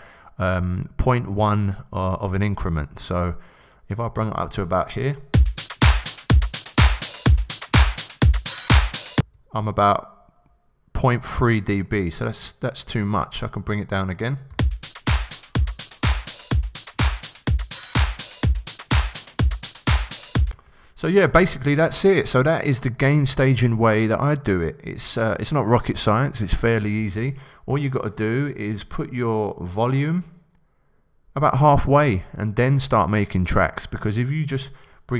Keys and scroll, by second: 5.3 shift+s, 6.1 s, 14.4 s, 20.5 shift+Return, 27.7 b.